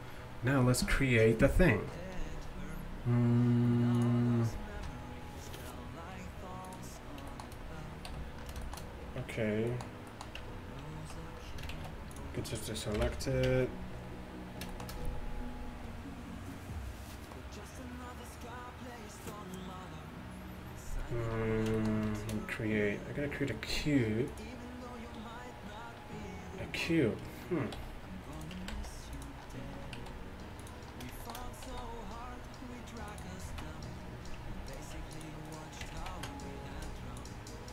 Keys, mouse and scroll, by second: 7.1 middle click, 8.1 t, 8.3 middle click, 8.4 middle click, 10.4 Tab, 11.8 shift+s, 13.0 KP_1, 13.5 Tab, 22.2 shift+a, 27.8 s, 28.6 Tab, 28.8 s, 30.0 s, 31.7 s, 33.5 z, 34.9-37.7 right drag, 35.2-37.0 drag, 36.0 ctrl+z, 36.8 b.